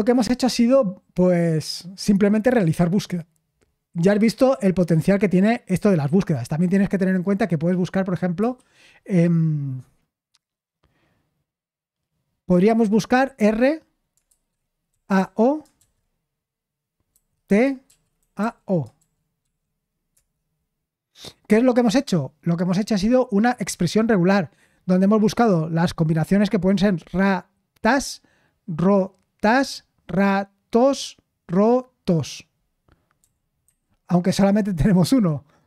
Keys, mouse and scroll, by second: 8.3 /, 13.1 r, 14.2-15.7 typing, 17.1-19.4 typing, 33.2-33.6 typing.